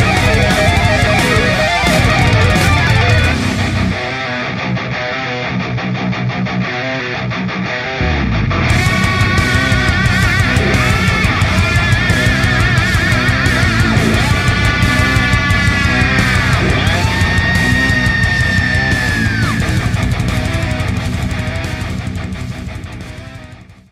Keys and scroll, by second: 2.2 space, 3.0 a, 8.7 b, 10.3 space, 12.0 v, 12.4 space, 17.3-18.2 typing, 19.7 ctrl+alt+v.